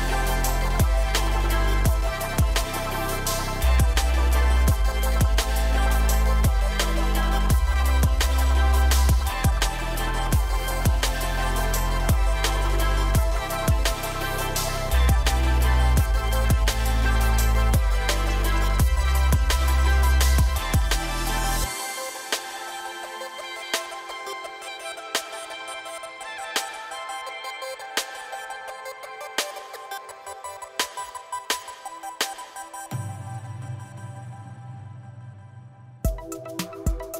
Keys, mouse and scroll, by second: 0.3 click, 0.9 click, 1.5 click, 2.8 ctrl+click, 3.7 shift+click, 4.5 alt+click, 5.4 alt+shift+click, 5.9 alt+shift+click, 6.4 KP_3, 7.1 g, 9.4-10.5 middle drag, 10.5 scroll down 1, 10.7-12.2 middle drag, 12.3-13.7 middle drag, 13.7 Tab, 14.0 drag, 14.2-14.8 middle drag, 14.8 drag, 15.4-17.0 drag, 17.2 click, 17.4 click, 17.9 drag, 18.1 scroll up 2, 18.3 click, 18.5 Tab, 18.9 scroll up 1, 19.0-19.9 middle drag, 19.9 ctrl+r, 21.7-23.6 middle drag, 23.6 ctrl+r, 25.3 ctrl+r, 26.7-27.7 middle drag, 27.7 ctrl+r, 29.3-30.8 middle drag, 31.3 KP_7, 31.8-32.5 shift+middle drag, 32.5 click, 33.7 g.